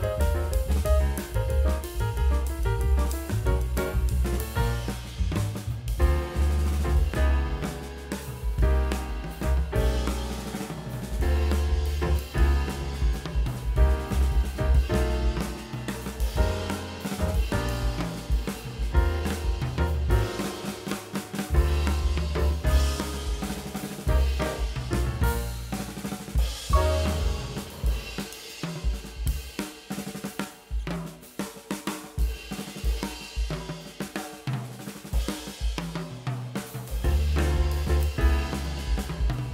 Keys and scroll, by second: 0.4 [, 3.6 4, 4.8 space, 6.7 o, 6.8 space, 7.3 v, 12.3 space, 12.7 space, 13.7 space, 13.9 space, 15.7-19.1 typing, 26.8 ctrl+e, 32.4 F9, 32.6 ctrl+space, 33.6 [, 34.4 space, 35.7 space, 36.1 space, 36.7 space, 37.1 space.